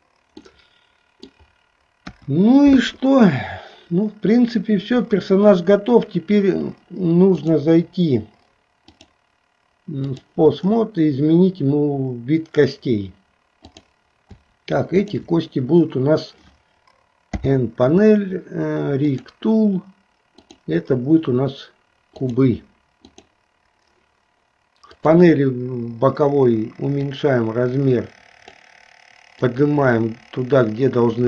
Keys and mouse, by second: 0.5-1.6 middle drag, 2.3 KP_1, 7.4 click, 9.0-10.3 drag, 13.7 click, 15.1 shift+click, 17.4 n, 19.1 click, 20.4-22.5 drag, 23.2 click, 25.0 click, 27.0-28.7 drag, 29.4-31.2 drag.